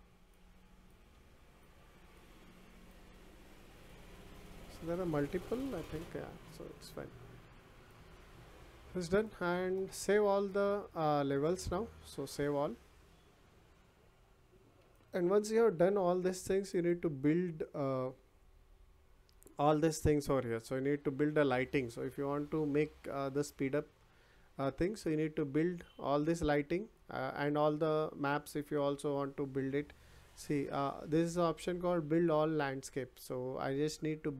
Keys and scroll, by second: 5.5 Delete.